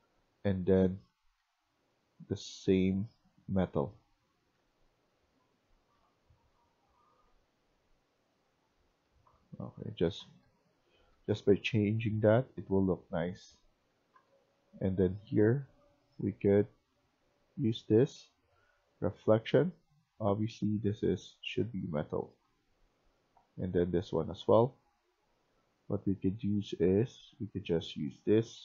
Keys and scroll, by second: 0.0-0.8 typing, 3.0-4.5 typing, 5.9-6.4 typing, 9.0-12.1 typing, 13.2-14.7 typing, 21.3-22.3 typing, 28.2-28.6 typing.